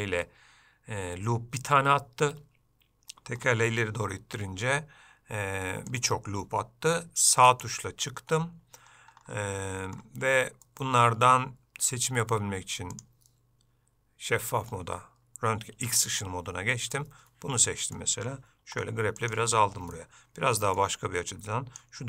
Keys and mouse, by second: 10.8 middle click, 13.0-17.1 drag, 17.7 middle click, 20.1 middle click, 21.4 click.